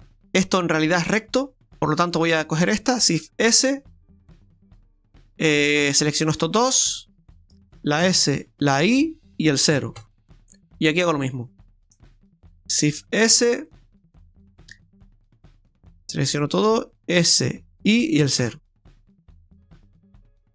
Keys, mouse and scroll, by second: 0.2 shift+middle click, 0.2-0.6 scroll up 4, 2.3 right click, 3.2 shift+s, 5.5 shift+right click, 6.1 shift+right click, 8.0 s, 12.4 right click, 13.1 shift+s, 15.5 right click, 16.1 shift+right click, 17.2 s.